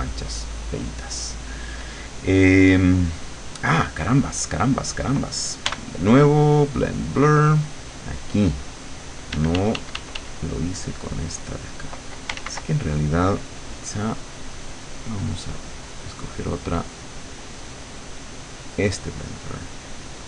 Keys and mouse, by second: 5.8 b, 6.7 click, 7.6 click, 9.4 d, 10.6-12.1 drag, 12.4 ctrl+z, 14.6 click, 15.8-17.0 drag, 18.8 click.